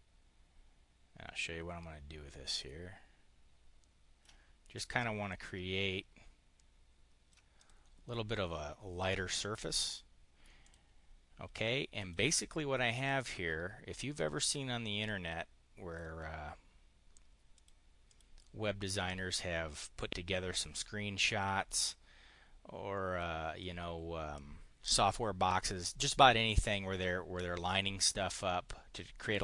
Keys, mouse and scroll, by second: 5.1-7.3 ctrl+drag, 7.5 click, 9.7 click, 10.3 drag, 11.9 click, 12.9-15.9 drag, 17.3 click, 17.9 click.